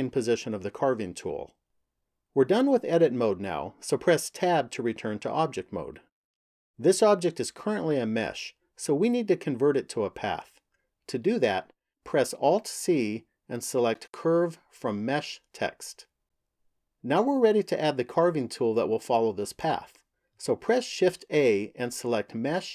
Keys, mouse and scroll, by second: 4.2 Tab, 12.3 alt+c, 20.9 shift+a.